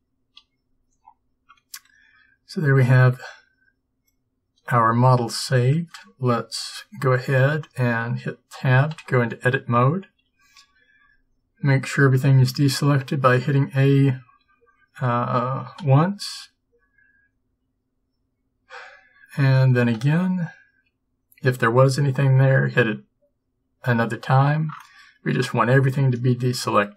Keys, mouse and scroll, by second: 9.0 Tab, 10.4 a, 15.9 a, 20.0 a.